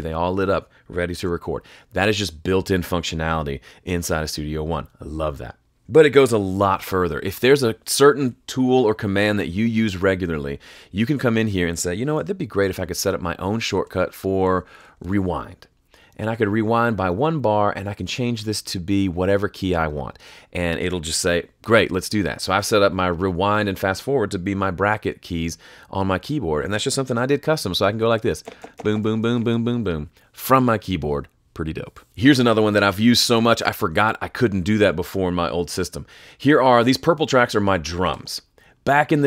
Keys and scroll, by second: 1.2 r, 6.7 alt+k, 13.5-15.5 typing, 27.8 [, 28.4 ], 29.0 [, 32.0 F3.